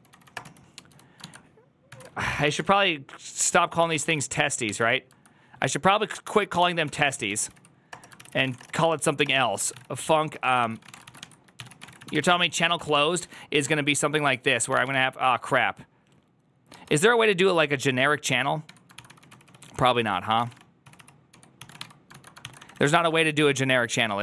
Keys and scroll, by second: 0.0-4.7 typing, 6.2-15.3 typing, 8.0 ctrl+c, 16.6 typing, 18.5-23.0 typing.